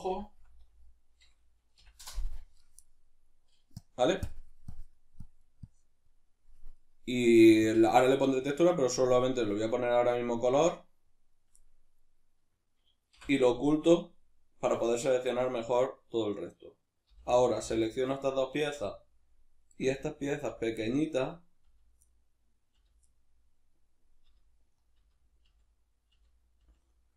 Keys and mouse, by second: 4.7 click, 5.2 click, 5.6 click, 7.6 click, 10.6-16.1 drag, 13.2 h, 16.1 right click, 17.1 l, 20.8-27.1 middle drag, 21.7 l, 22.7 l, 24.3 l.